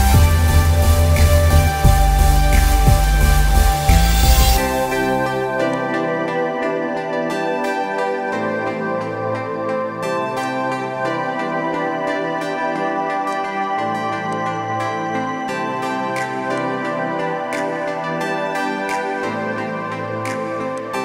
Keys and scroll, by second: 5.0 ctrl+j.